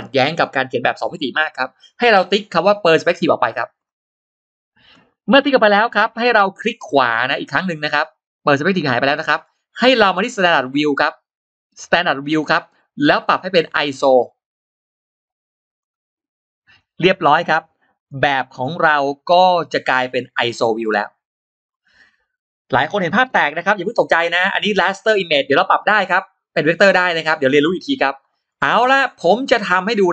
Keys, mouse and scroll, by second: 3.7 click, 5.3 middle click, 5.7 middle click, 15.6 click, 16.7-17.3 scroll down 2, 17.8 click, 18.1-18.7 scroll up 2, 18.8 click, 19.1 scroll up 2, 20.3 scroll down 2, 20.7-21.0 scroll up 2, 21.6-21.9 scroll down 2, 22.0 scroll up 2, 28.3-28.7 scroll down 2, 28.9 scroll up 2.